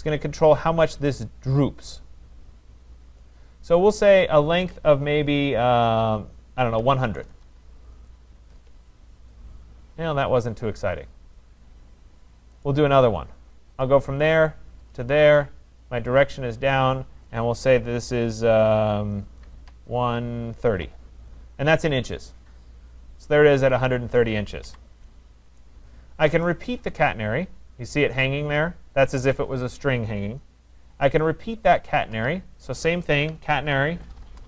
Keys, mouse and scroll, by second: 6.8-7.2 typing, 8.5 Return, 12.7-13.8 right drag, 13.8 click, 14.9 click, 16.5 click, 19.5-21.3 typing, 21.9 Return, 23.7 click, 24.7 Delete, 27.9 right click, 30.7 right click, 31.8 right click, 33.2-34.3 typing.